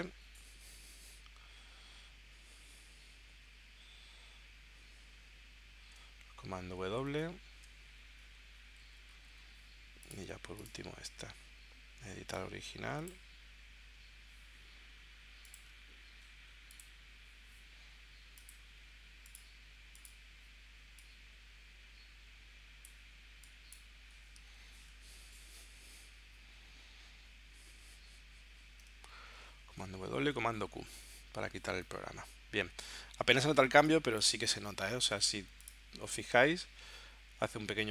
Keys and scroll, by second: 6.4 super+w, 7.1 super+Tab, 24.5 super+s, 29.1 super+w, 30.1 super+q, 33.7 space.